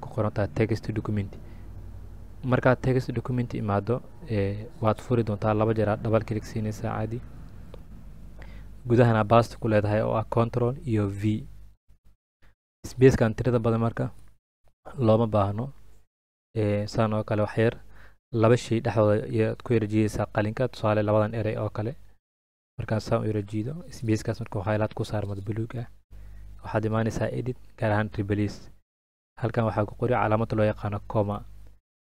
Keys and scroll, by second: 10.3 ctrl+v, 30.2 BackSpace.